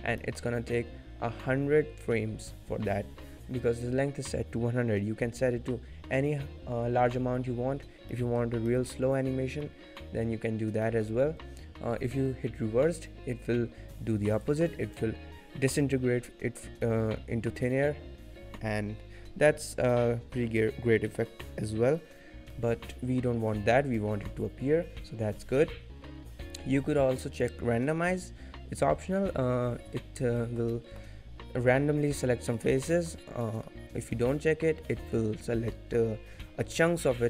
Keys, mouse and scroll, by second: 0.1 middle click, 0.4-0.7 scroll down 1, 7.9 scroll down 4, 8.1 middle click, 8.3-8.6 scroll up 4, 8.6 middle click, 9.7-10.2 scroll down 2, 10.5 scroll down 2, 10.8 shift+middle click, 11.1-11.5 scroll up 2, 14.3 click, 16.3 middle click, 16.8 middle click, 19.9 middle click, 20.5-21.0 scroll up 4, 21.0 middle click, 22.5 middle click, 23.6-23.9 scroll down 3, 23.9 middle click, 29.9-30.3 scroll down 2, 30.3 shift+middle click, 30.7 middle click, 31.2 shift+middle click, 31.4-31.9 scroll up 1, 31.9 scroll up 3, 32.2 middle click, 32.8-33.3 scroll down 4, 33.4 middle click, 33.9-34.8 scroll up 1, 34.8 middle click, 36.0-36.4 scroll up 3, 36.4 shift+middle click.